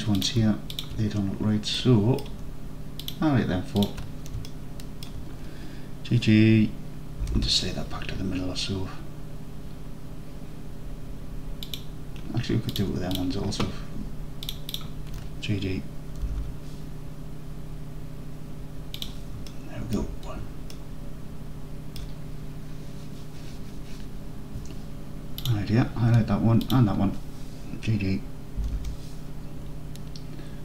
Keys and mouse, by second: 1.8-2.3 middle drag, 4.6-5.1 alt+middle drag, 7.3 g, 7.4 g, 11.7 click, 12.8 click, 14.5 shift+click, 16.3 g, 16.4 g, 19.1 click, 19.5-20.0 alt+drag, 20.8-21.7 alt+drag, 21.7 alt+middle click, 28.7 g, 28.8 g.